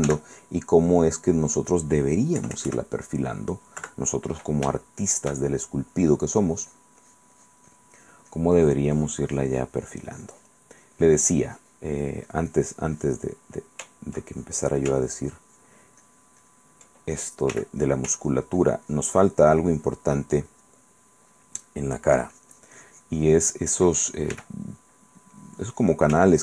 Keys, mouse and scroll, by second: 0.3 f, 1.6 click, 2.6 KP_Add, 4.0 KP_Subtract, 4.9 shift+click, 5.7 shift+click, 6.8-10.7 drag, 11.0-13.6 drag, 14.5 ctrl+click, 17.7 f, 18.0 click, 18.4-24.1 ctrl+drag, 24.5 f, 24.7 click, 25.4 click.